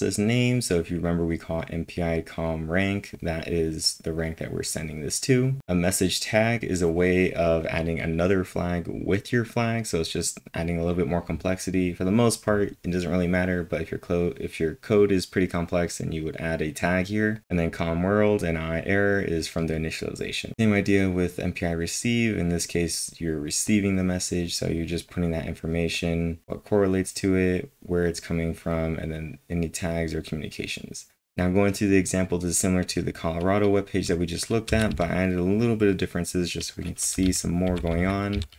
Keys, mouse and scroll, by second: 3.8-5.6 drag, 5.2-5.9 typing, 5.6-16.7 drag, 16.5-17.3 typing, 16.8 click, 17.3 click, 17.4-20.5 drag, 24.8-25.5 typing, 25.0-26.4 drag, 26.4-29.5 drag, 28.3 click, 29.8 click, 34.6 alt+Tab, 34.6 typing, 37.0-38.5 typing.